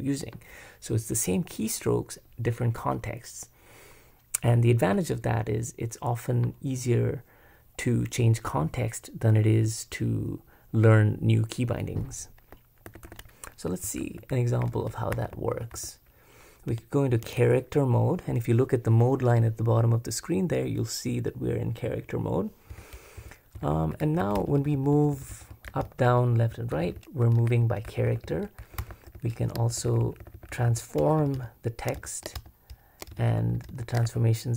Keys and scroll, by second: 12.9 super+b, 13.1 super+b, 13.6-16.2 typing, 17.2 super+x, 22.7-25.1 typing, 29.5-34.5 typing.